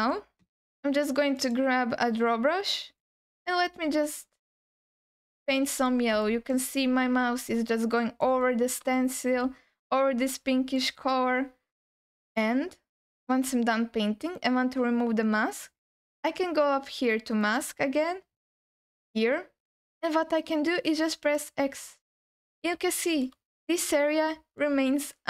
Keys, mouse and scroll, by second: 1.4 click, 3.0-5.9 drag, 5.9 scroll down 2, 6.2 alt+middle click, 6.8-8.3 drag, 8.4 click, 8.6 alt+middle click, 8.9 alt+shift+middle click, 9.5-10.8 drag, 11.1 alt+middle click, 14.4 click, 17.4 click, 21.2 click, 22.9 shift+middle click, 23.1 alt+shift+click, 23.6-23.9 scroll up 2, 24.6-25.2 alt+middle drag.